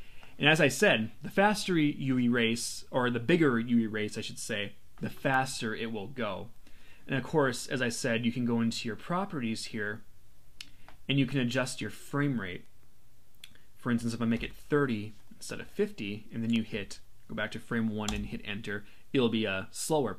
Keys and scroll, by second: 18.1 Return.